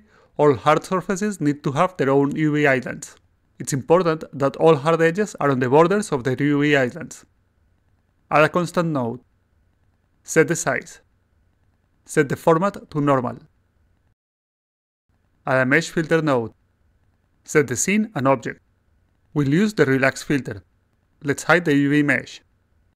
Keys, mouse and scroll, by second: 0.9-5.5 alt+drag, 7.8 click, 8.9 click, 10.5 ctrl+click, 11.1 click, 11.6 click, 12.1 ctrl+v, 13.4 click, 14.0 click, 14.5 click, 16.1-16.8 drag, 17.4 click, 17.8 click, 18.1 click, 18.7 click, 21.1 click, 21.9 click, 22.2-22.9 alt+drag.